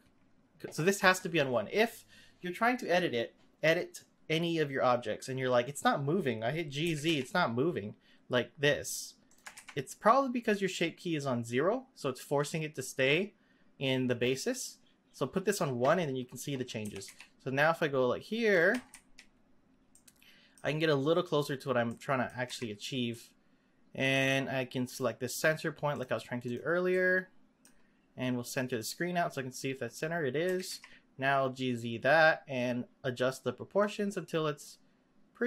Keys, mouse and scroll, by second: 6.8 g, 9.5 ctrl+z, 16.8 g, 18.7 z, 18.9 z, 19.9 middle click, 20.9-21.9 scroll up 1, 21.9 middle click, 22.4 z, 23.1-24.9 middle drag, 24.9 click, 25.9 click, 26.4 click, 26.9-28.7 middle drag, 28.7 click, 29.8-30.4 scroll up 1, 30.4 g.